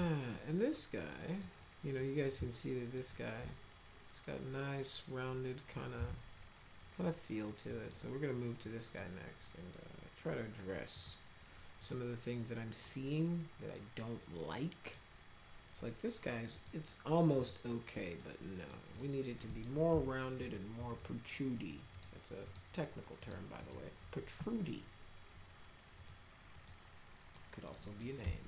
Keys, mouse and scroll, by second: 0.8-1.4 middle drag, 2.0 middle drag, 2.4 alt+middle click, 3.1 alt+middle click, 6.0 z, 7.3 middle click, 7.7 middle click, 8.6 middle click, 10.9 click, 11.8 click, 12.8 middle click, 14.8 click, 16.5 click, 17.4 click, 18.2 middle click, 18.5 right click, 18.9 click, 19.4 right click, 19.9 F3, 20.4 F3, 20.7 F3, 21.9 click, 22.4 click, 23.2 click, 23.6 click, 24.0 F3, 25.9 click, 26.6 click, 27.4 middle click, 27.8 middle click, 28.2 F3.